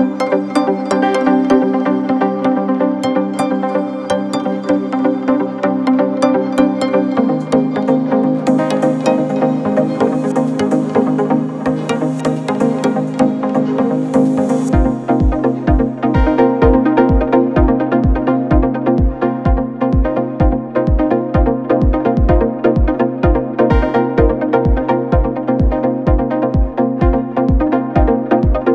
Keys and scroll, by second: 1.3 4, 4.1 F9, 6.6 F1, 7.9 F1, 10.0 9, 10.2 Return, 13.6 1, 13.8 Return, 16.0 F1, 19.1 ctrl+d, 19.2 Escape, 22.3 F9, 23.7 2, 24.8 ctrl+d, 24.9 Escape, 27.3 4.